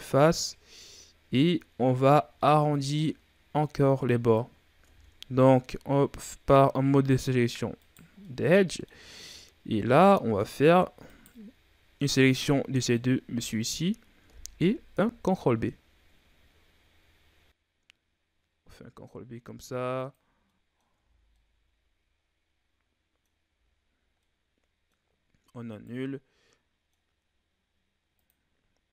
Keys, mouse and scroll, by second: 2.3-4.8 middle drag, 4.8 ctrl+Tab, 7.8 right click, 8.2-9.2 middle drag, 9.2-10.0 scroll up 1, 10.0-11.0 middle drag, 11.0 shift+right click, 11.7 scroll down 1, 12.0-14.8 middle drag, 14.8 ctrl+b, 20.3 scroll down 1, 20.4 middle click, 20.9 Tab, 21.3-23.5 middle drag, 23.5 a, 23.7-24.2 scroll down 4, 24.2-25.1 middle drag, 25.1-25.7 scroll up 4, 25.7 right click, 26.4-28.1 middle drag, 28.1 click.